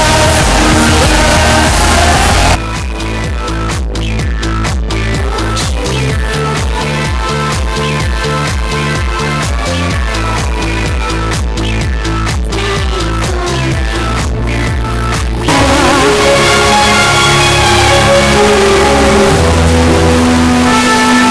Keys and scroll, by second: 2.6 Page_Down.